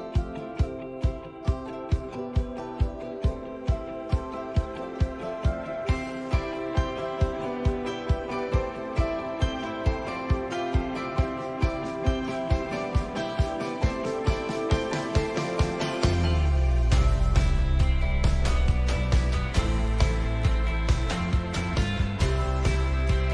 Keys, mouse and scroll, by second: 1.3 g, 4.0-9.4 middle drag, 4.8 shift+a, 5.9 s, 8.8 click, 9.4-23.3 drag, 9.5-9.9 middle drag.